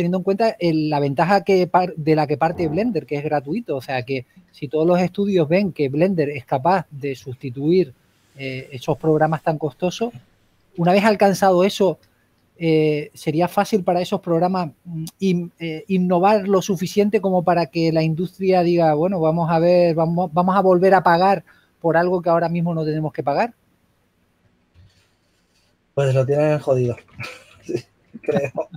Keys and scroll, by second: 5.8 typing, 8.1 s, 12.9-14.1 typing, 15.7 s, 22.5-23.2 typing, 26.2-26.6 typing, 28.4-28.7 typing.